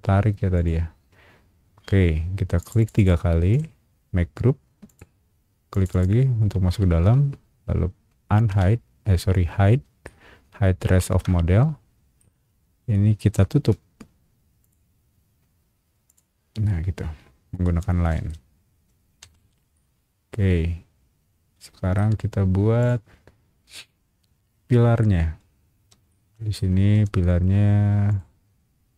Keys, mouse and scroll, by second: 0.5 click, 2.6 click, 2.8 click, 2.9 click, 3.5-4.8 right drag, 4.8 click, 5.7 click, 5.9 click, 8.5 u, 10.0-12.2 middle drag, 13.6 l, 14.6 click, 16.0 click, 18.1 space, 18.7 scroll down 1, 19.2 Escape, 19.7-21.9 middle drag, 22.1 scroll up 1, 22.8 shift+click, 25.2 scroll up 1, 26.0 shift+middle click, 26.0 shift+scroll up 1, 26.7 scroll up 1, 26.9 r, 28.1 click.